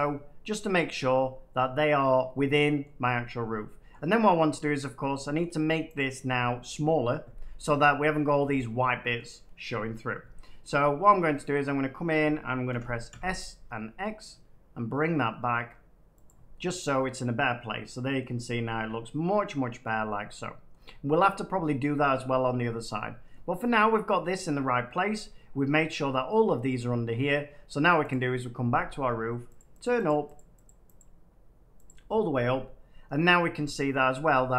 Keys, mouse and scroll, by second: 0.3 click, 1.0 middle click, 2.8 middle click, 3.8 shift+middle click, 4.5 middle click, 4.8 scroll down 3, 4.9 scroll, 5.3 shift+middle click, 5.9 click, 9.1 middle click, 11.5 middle click, 12.6 s, 13.0 x, 16.2 click, 18.1 middle click, 19.8 middle click, 20.7-22.5 middle drag, 23.2 middle click, 24.9 middle click, 27.1 middle click, 28.0 click, 29.5-31.8 drag, 31.9 click, 33.4 click, 33.8 shift+middle click.